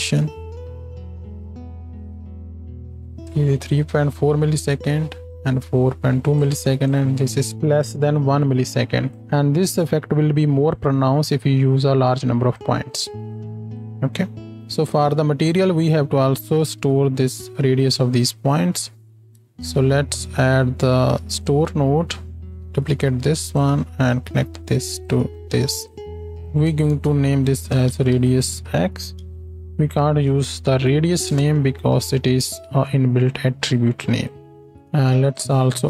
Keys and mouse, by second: 3.1 space, 14.6-18.3 drag, 14.6 g, 16.8 g, 18.3 middle click, 18.4 click, 18.5-24.0 middle drag, 19.8 shift+a, 22.6 shift+d, 24.0-35.8 drag, 26.9 BackSpace, 34.7 shift+a.